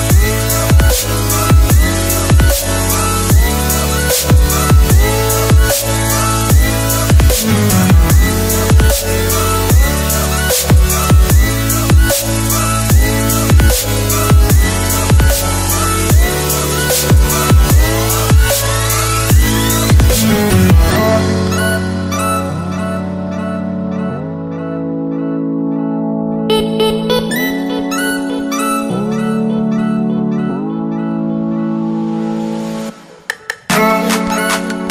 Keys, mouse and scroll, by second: 0.5 click, 0.8 Delete, 1.2 click, 1.7 Delete, 2.4 click, 3.3 alt+Tab, 3.8 click, 3.9-6.6 typing, 4.1 click, 6.5 click, 8.8 KP_Add, 9.2-12.1 typing, 10.4 Return, 10.7 KP_Add, 12.2 click, 12.8 Delete, 13.4 click, 14.5 alt+Tab, 15.2 click, 15.7 alt+Tab, 16.1 v, 16.6 click, 21.4 Left, 21.8 Right, 22.5 alt+scroll down 1, 22.9 alt+scroll up 1, 23.1 click, 24.3 Delete, 25.0 alt+Tab, 25.3 alt+click, 25.6 super+e, 26.3 click, 26.4 scroll down 1, 27.2 click, 29.7 click, 30.0 Return, 30.5 u, 30.8 click, 33.5 scroll down 1, 33.9 scroll up 1, 34.6 scroll up 1.